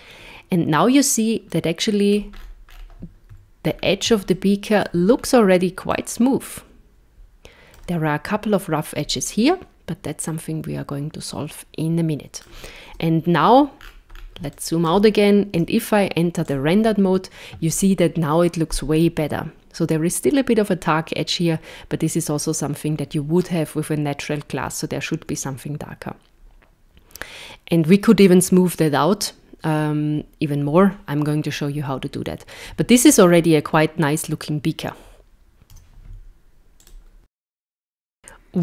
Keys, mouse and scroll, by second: 1.6 middle click, 2.4-3.0 scroll up 9, 3.7-4.1 scroll down 2, 4.3 shift+middle click, 5.2-5.8 scroll up 1, 5.9 middle click, 9.5 middle click, 12.9 KP_0, 13.8-14.4 scroll down 8, 14.5 shift+middle click, 15.5 z, 35.7 z.